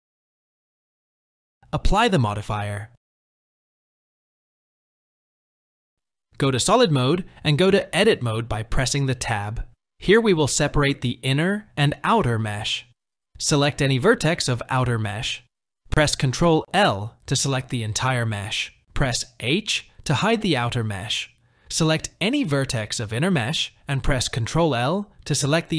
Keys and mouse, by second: 3.5-4.3 drag, 6.1 click, 9.1 Tab, 13.1 click, 18.1 ctrl+l, 19.4 h, 20.9 click, 25.0 ctrl+l.